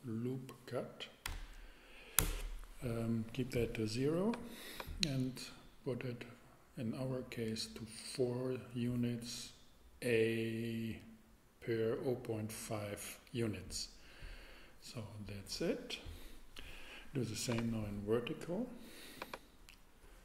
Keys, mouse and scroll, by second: 1.3 0, 2.2 Return, 19.1 click.